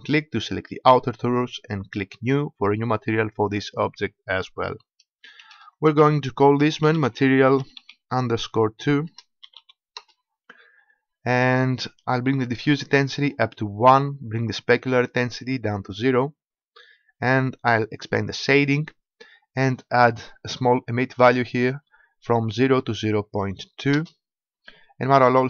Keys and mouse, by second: 2.2-5.4 drag, 12.6-14.6 drag, 15.2-17.0 drag, 18.5-20.3 drag, 21.2-25.4 drag.